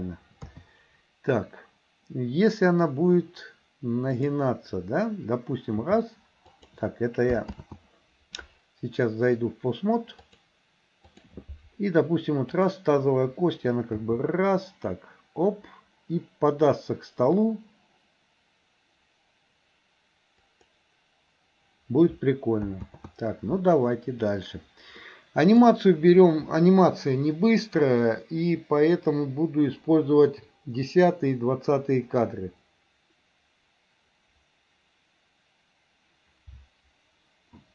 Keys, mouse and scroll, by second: 0.4 KP_3, 5.9 g, 7.7 ctrl+z, 10.3-11.4 drag, 14.1 g, 22.9 ctrl+z, 25.1 middle click.